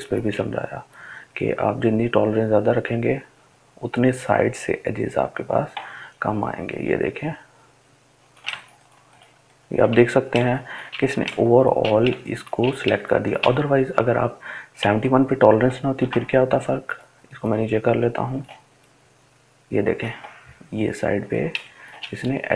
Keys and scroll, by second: 7.4 ctrl+space, 7.9 ctrl+space, 8.1 ctrl+space, 9.3 ctrl+space, 9.7-10.6 ctrl+space, 11.0 ctrl+space, 11.6 ctrl+space, 11.7 ctrl+space, 12.4 ctrl+space, 14.3-14.7 ctrl+alt+z.